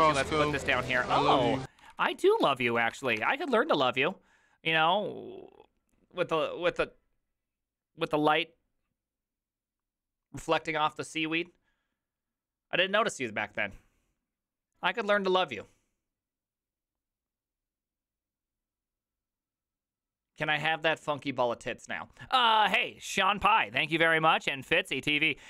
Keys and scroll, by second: 0.0-3.5 typing, 1.2 ctrl+u, 1.3 ctrl+u.